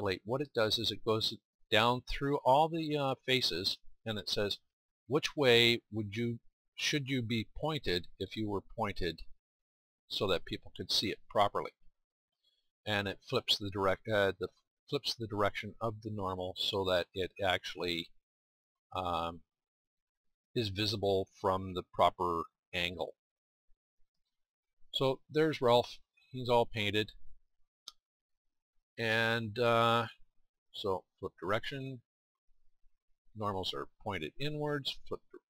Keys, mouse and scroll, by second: 1.9 middle click, 2.3-3.5 middle drag, 3.8-5.8 middle drag, 6.3-8.3 middle drag, 10.4-11.7 middle drag, 24.8-31.0 middle drag, 32.4-35.4 drag.